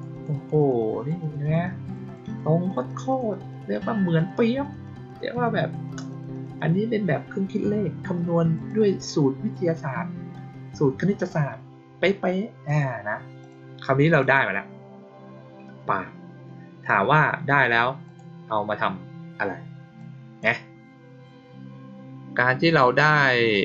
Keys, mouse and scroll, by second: 0.1 click, 0.3 click, 0.5 click, 0.7 click, 1.1 click, 1.3 click, 1.6 click, 2.0 click, 2.2 click, 2.6 click, 2.8 click, 3.0 click, 3.2 click, 3.4 click, 3.6 click, 3.9 click, 4.1 click, 4.3 click, 4.5 click, 4.8 click, 5.0 click, 5.2 click, 5.5 click, 5.8 click, 6.0 click, 6.2 click, 6.5 click, 8.5 click, 11.1 click, 12.6 click, 13.3 click, 14.1 click, 18.0 click, 19.9-20.3 drag, 23.4-23.6 drag.